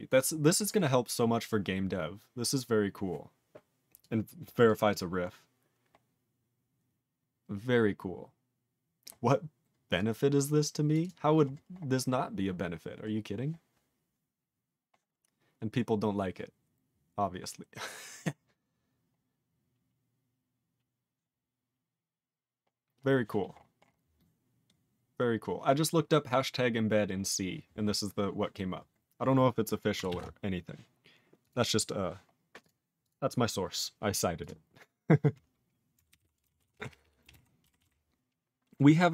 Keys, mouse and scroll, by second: 30.2 scroll down 10, 33.1 click, 34.4 click, 34.4 click, 36.1 ctrl+n, 36.2 ctrl+e, 36.6 ctrl+s, 36.7 ctrl+a, 36.9 ctrl+p, 37.0 ctrl+p, 37.2 ctrl+space, 37.3 ctrl+e, 37.8 ctrl+s, 37.9-39.0 ctrl+n.